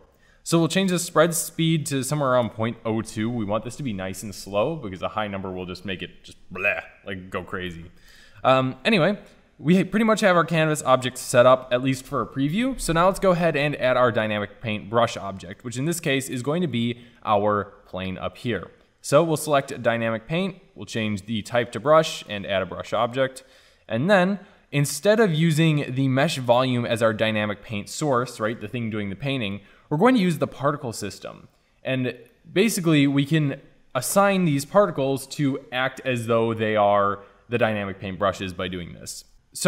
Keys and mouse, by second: 0.9-9.1 middle drag, 9.1-16.9 drag, 17.2-31.5 drag, 32.3 middle drag, 32.6-39.6 drag.